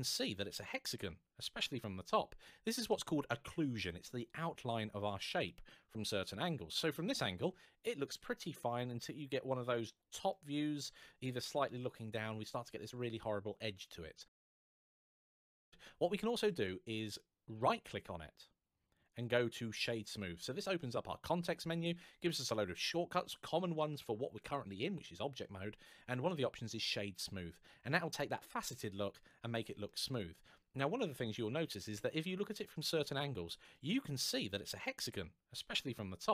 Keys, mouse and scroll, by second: 5.2 middle click, 16.2 right click, 26.6 click, 29.6 middle click, 33.5 middle click.